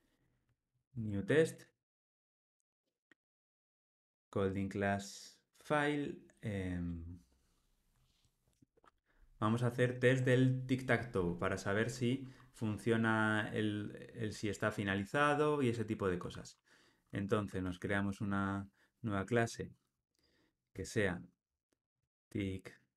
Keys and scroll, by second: 0.8 super+n.